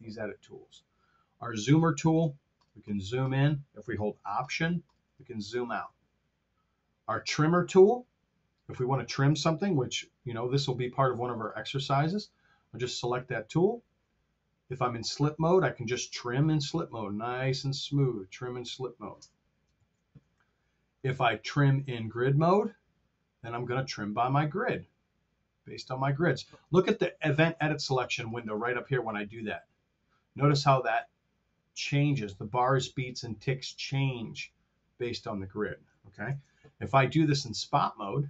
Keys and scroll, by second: 19.7 super+z, 37.2 super+z.